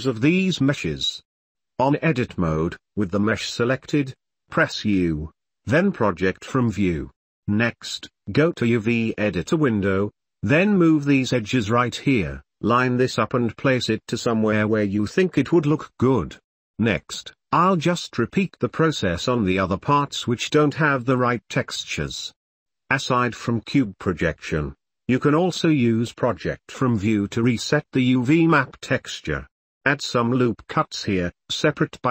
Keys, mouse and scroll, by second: 0.8-2.8 middle drag, 2.8 click, 5.5 u, 12.4 s, 12.6 g, 12.8 s, 13.1 Tab, 13.3 Tab, 13.4 click, 13.7 g, 14.1 Tab, 14.2 middle click, 14.5 Tab, 14.6 Tab, 14.8 g, 15.2 Tab, 15.4 Tab, 15.5 middle click, 15.5 click, 15.6 middle click, 15.8 ctrl+s, 16.1 Tab, 16.3 g, 16.7 ctrl+s, 16.8 shift+middle click, 17.1 Tab, 17.5-20.8 typing, 19.2 shift+click, 19.7 shift+middle click, 19.8 middle click, 20.9 Tab, 21.0 middle click, 21.7 middle click, 22.6 Tab, 23.3 g, 23.6 g, 23.8 Tab, 23.9 middle click, 24.6 middle click, 24.9 Tab, 25.2 g, 25.8 Tab, 25.9-26.4 middle drag, 26.6 ctrl+s, 26.6 shift+middle click, 26.9 shift+middle click, 27.1-27.5 middle drag, 27.5 shift+middle drag, 27.8 middle click, 28.3 middle drag, 28.6 middle drag, 28.8 Tab, 29.5 l, 29.8 ctrl+r, 31.4 shift+middle click, 31.8 shift+middle click, 32.0 shift+middle click.